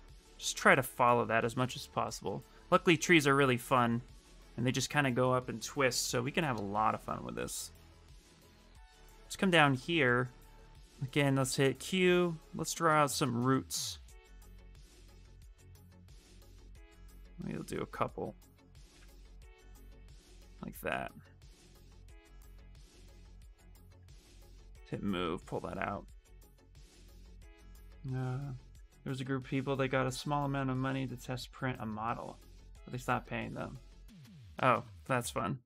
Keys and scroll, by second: 11.1 q, 13.6 w, 18.7 q, 21.6 q, 23.7 w.